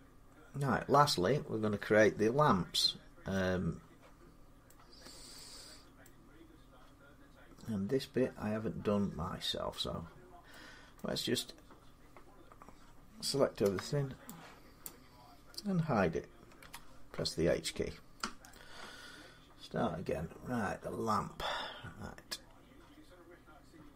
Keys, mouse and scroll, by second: 2.7 scroll down 4, 3.8 scroll up 4, 4.5 middle click, 4.9-5.2 scroll up 3, 5.9 middle click, 5.9 scroll, 10.8 middle click, 13.5 b, 14.7 click, 16.4 h, 17.5-18.0 scroll up 6, 18.3-21.7 middle click.